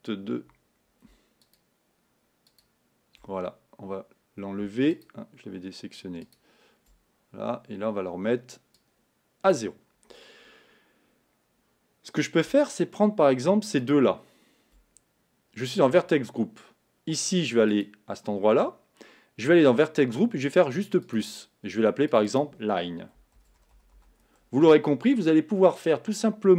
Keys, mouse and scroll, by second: 1.7 shift+click, 2.8 shift+click, 6.5 shift+click, 9.0-14.1 drag, 21.5 click, 22.2 click, 22.3-26.5 drag.